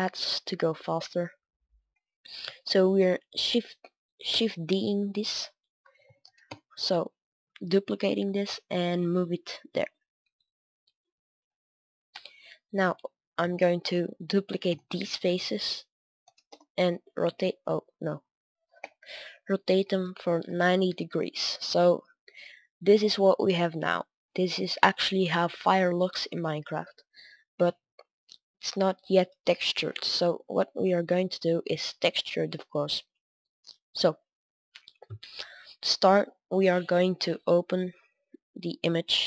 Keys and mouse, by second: 1.8-3.2 middle drag, 3.2 shift+d, 5.9 r, 7.6-9.6 drag, 9.6-12.6 middle drag, 12.6-13.6 right drag, 13.3 KP_7, 13.6 middle click, 14.4 shift+d, 15.1 r, 17.0-19.3 middle drag, 18.7 KP_7, 19.4 r, 20.8 z, 21.6-24.4 middle drag, 22.2 Tab, 24.6 middle drag, 25.0-29.3 middle drag, 29.8-30.5 middle drag, 30.9 middle click, 31.2 middle click, 33.3 Tab, 33.9 a, 34.1 a, 38.7 middle click, 38.9 click.